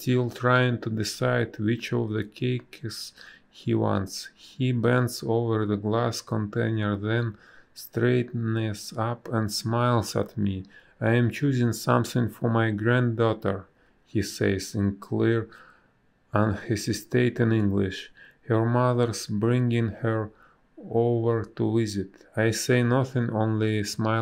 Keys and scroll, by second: 3.8 space, 5.7 space, 6.3 ctrl+z, 6.9 ctrl+z, 7.5 ctrl+z, 8.0 ctrl+z, 8.8 ctrl+z, 10.0 b, 10.5 space, 14.5 space, 19.7 space.